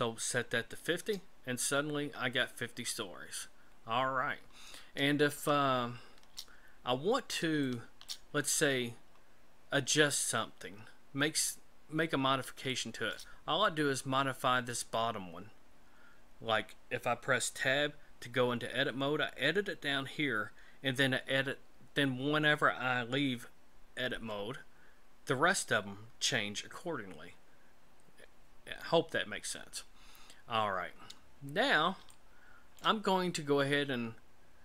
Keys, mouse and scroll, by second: 5.4 shift+middle click, 6.8-7.5 scroll up 5, 7.6 shift+middle click, 8.3-10.2 scroll up 8, 10.7-12.1 scroll down 3, 12.7 shift+middle click, 17.6 Tab, 24.2 Tab, 30.7-32.0 scroll down 8, 32.1 shift+middle click.